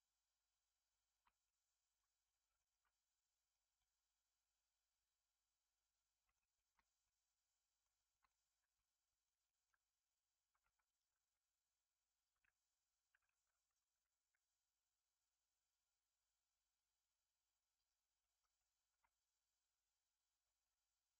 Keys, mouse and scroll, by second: 1.4-3.7 middle drag, 3.7-6.5 right drag, 6.5-6.8 shift+middle drag, 6.8 scroll down 1, 7.0-8.2 middle drag, 8.2 scroll up 1, 8.5 Tab, 8.7-10.5 middle drag, 9.3 scroll up 1, 10.5 2, 10.8 alt+click, 13.0 g, 18.1 middle click, 18.9 Tab, 19.0-19.9 scroll down 4.